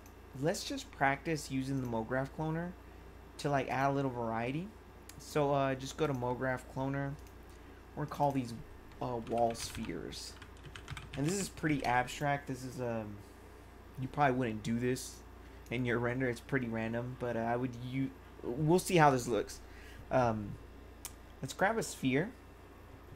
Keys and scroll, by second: 9.0-12.1 typing.